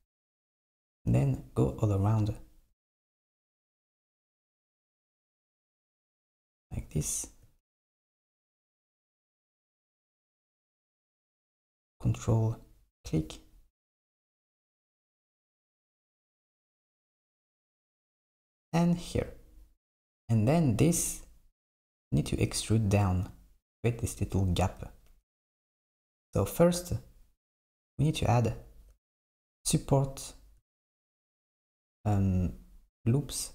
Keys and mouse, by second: 0.8 ctrl+click, 4.1 ctrl+click, 5.6 ctrl+click, 12.6 ctrl+click, 15.3 ctrl+click, 18.7 ctrl+click.